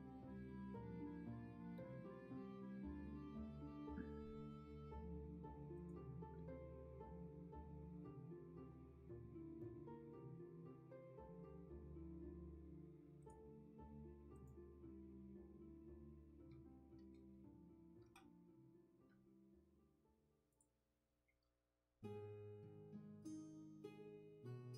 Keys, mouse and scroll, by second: 9.2 ctrl+z.